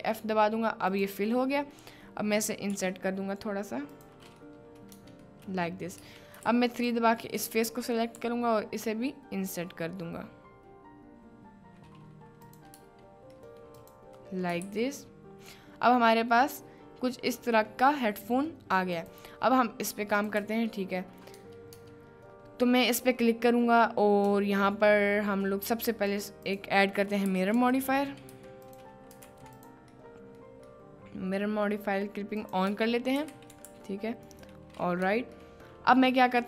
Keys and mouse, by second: 1.0 click, 1.4 middle click, 1.7 right click, 4.4 middle click, 5.0 Tab, 5.0 i, 5.4 middle click, 6.1 Tab, 6.4 3, 6.7 click, 8.2 i, 12.7 Tab, 13.5 middle drag, 13.8 click, 14.4 middle click, 14.6 ctrl+s, 15.0-16.4 middle drag, 16.7-17.7 middle drag, 18.4 middle click, 19.0 click, 20.1 click, 20.8-21.3 shift+middle drag, 21.7 Tab, 24.7-25.4 shift+middle drag, 26.1-29.0 drag, 29.2 ctrl+a, 30.0-30.5 middle drag, 30.7-31.0 middle drag, 31.0-31.7 drag, 32.4 click, 32.7 Tab, 33.2 a, 33.5 g, 33.7 x, 35.0 Tab, 35.5-35.8 middle drag.